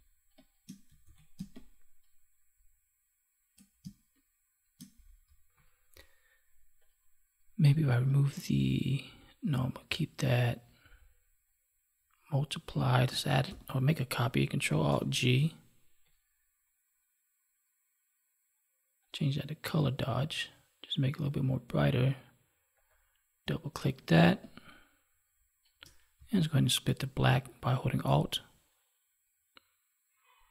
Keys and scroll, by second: 1.0 ctrl+s, 1.2 space, 13.4 ctrl+j, 14.8 ctrl+alt+g, 24.0 space.